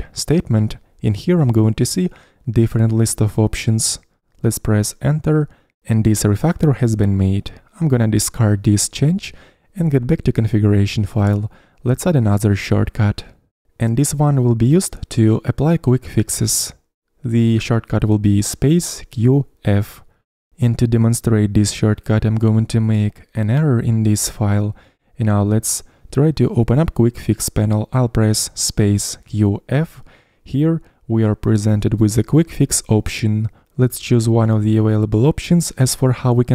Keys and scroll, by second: 1.1-2.0 typing, 29.3-30.2 typing.